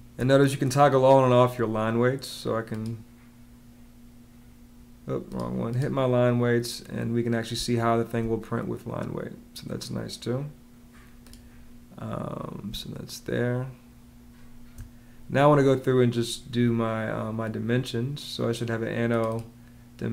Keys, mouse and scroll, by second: 7.4 space, 12.5 space.